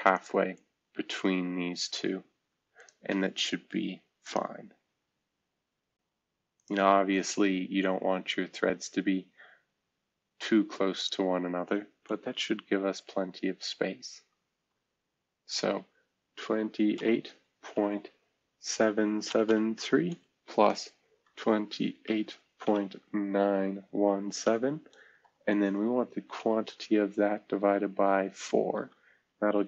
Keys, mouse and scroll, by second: 6.5 middle click, 7.1-8.8 scroll down 1, 9.3 scroll down 1, 9.7-10.3 scroll up 1, 10.3-10.7 ctrl+scroll up 1, 14.1 shift+v, 16.4-17.7 typing, 19.2-25.2 typing, 26.3-27.0 typing, 27.7 Left, 27.7-28.3 Left, 28.7 Left.